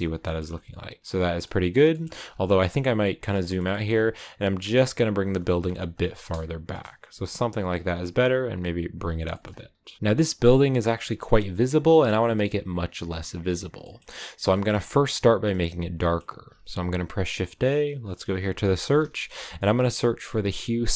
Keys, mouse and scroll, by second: 0.1 shift+middle click, 1.0-2.8 scroll down 13, 1.8 middle click, 2.9-4.4 middle drag, 4.4 g, 5.3 middle click, 5.5 g, 6.6 KP_0, 8.9 g, 9.2 shift+middle click, 9.6 g, 9.9 click, 10.6 shift+middle click, 10.8 shift+scroll up 2, 11.5-13.2 shift+middle drag, 13.2 click, 16.4-20.9 drag.